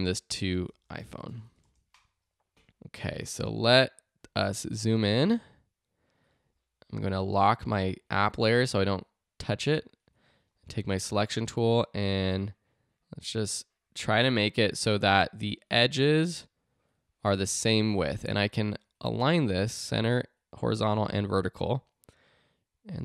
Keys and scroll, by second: 0.4-2.0 typing, 4.2 z, 5.2 space.